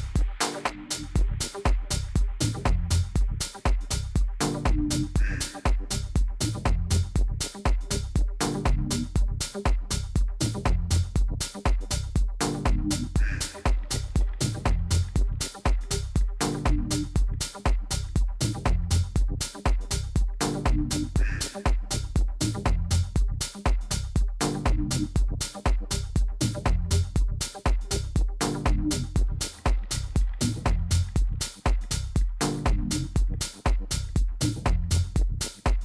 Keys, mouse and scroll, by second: 2.1 a, 2.4 a, 5.3 b, 12.0 e, 21.7-23.6 drag, 31.1-33.8 middle drag, 32.9 a.